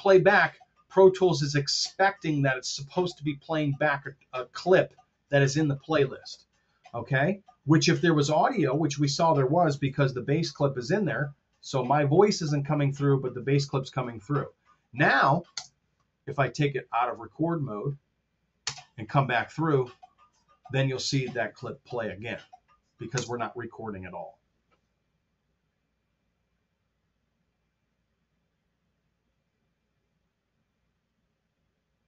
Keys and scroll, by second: 10.8 super+z, 15.5 space, 18.6 space, 23.0 space.